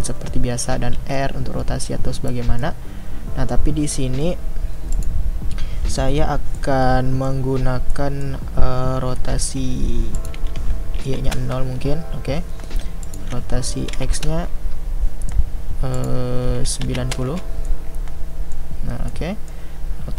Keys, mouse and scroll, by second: 1.0 r, 2.6-11.3 middle drag, 11.3-17.7 drag, 17.7-20.1 middle drag.